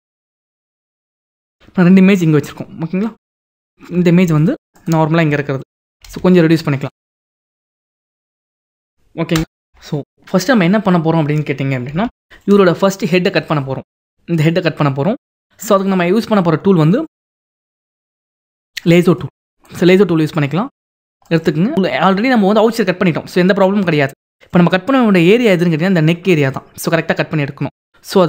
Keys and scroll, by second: 0.9 ctrl+-, 1.7 ctrl+-, 5.3 ctrl+t, 9.1 F9, 12.1 ctrl+=, 13.0 ctrl+=.